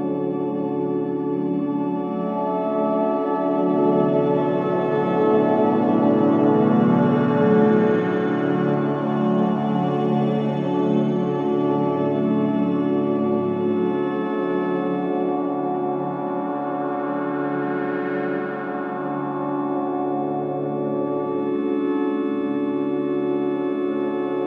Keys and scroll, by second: 3.3 ,, 4.7 F2, 5.2 F3, 7.8 ctrl+d, 8.1 Escape, 10.1 ctrl+d, 10.4 1, 10.9 Escape, 12.3 ctrl+d, 12.4 Escape, 14.0 ctrl+d, 14.1 Escape, 15.6 F3.